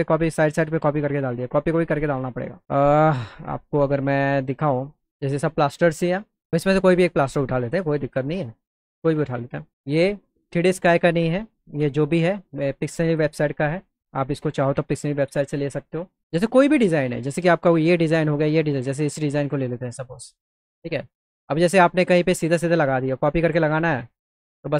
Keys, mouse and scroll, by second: 4.0 click, 7.6 click, 10.1 click, 16.4 click, 17.8 click, 19.3 alt+q, 19.9 middle click, 20.6 alt+middle click, 22.2 click, 24.5 z.